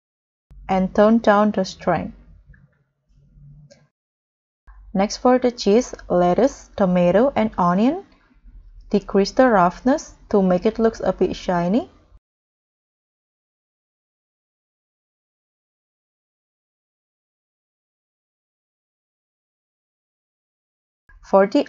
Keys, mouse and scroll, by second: 3.1-3.6 scroll down 6, 3.6-4.3 scroll up 2, 4.3-4.6 scroll down 1, 5.0 scroll up 1, 5.6-6.8 scroll down 11, 6.8-7.4 scroll up 10, 9.8 scroll down 3.